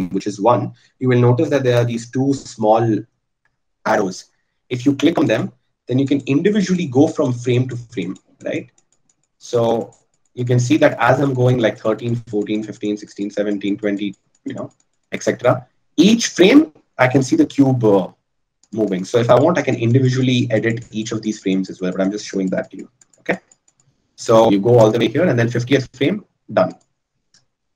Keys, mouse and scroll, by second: 26.2-27.7 drag.